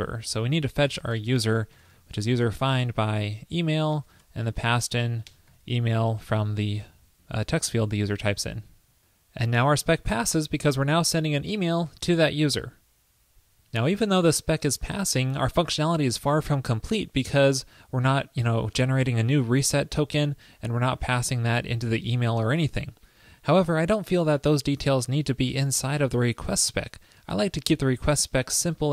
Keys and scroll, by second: 4.4 ctrl+p, 6.3 super+Right, 7.0 super+s.